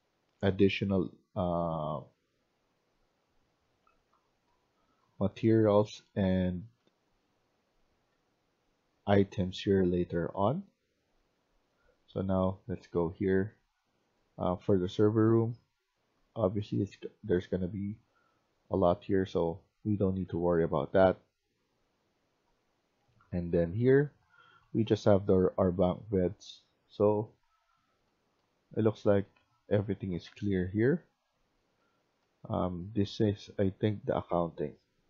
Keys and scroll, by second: 0.3 w, 1.0-1.7 d, 4.0-35.0 typing.